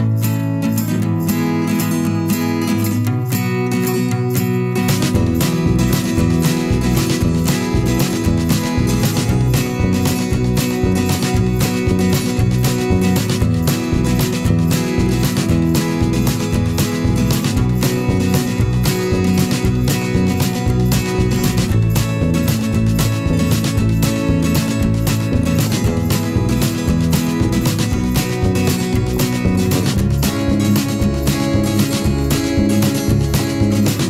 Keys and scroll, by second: 15.0 ctrl+t, 17.7 Return, 18.6 ctrl+j, 22.1 Down, 25.4 Delete.